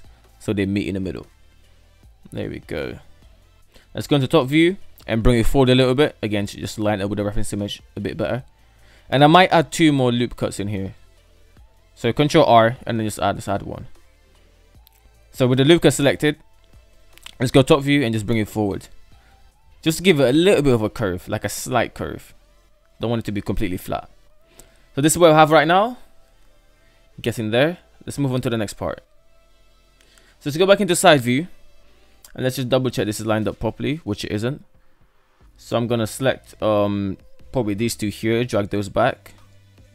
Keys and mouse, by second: 0.4 alt+z, 0.6-1.7 middle drag, 1.8 alt+z, 2.4 Tab, 2.6 KP_7, 3.2 Tab, 4.2 g, 7.3 shift+middle click, 9.6 ctrl+r, 10.9-11.3 middle drag, 12.8 alt+z, 13.6 alt+z, 16.5 KP_7, 17.6 g, 19.7 Tab, 22.0 middle drag, 22.2 middle click, 22.7 alt+z, 23.1-23.4 middle drag, 23.9 shift+middle click, 24.3-26.7 middle drag, 26.9 right drag, 27.2-28.9 middle drag, 29.4 KP_3, 30.7 shift+middle drag, 31.3 alt+z, 32.7-33.3 right drag, 33.3 Tab, 34.9 alt+z, 36.1 alt+z, 36.7 right click, 37.0 shift+right click, 38.0 g, 39.4 right click.